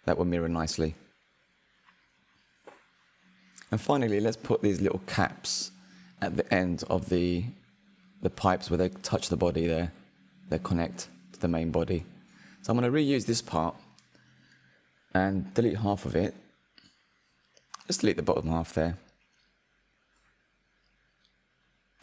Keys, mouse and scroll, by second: 2.9 click, 6.0-6.5 drag, 6.5-9.4 middle drag, 9.4 shift+d, 12.1 click, 14.6 Tab, 15.1-16.2 shift+middle drag, 16.2-17.2 drag, 19.1 l, 20.5 Delete.